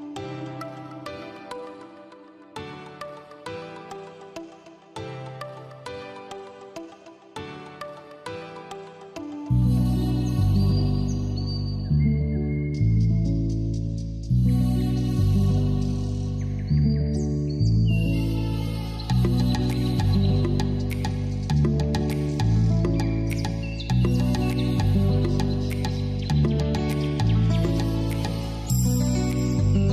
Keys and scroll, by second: 11.1 ctrl+t.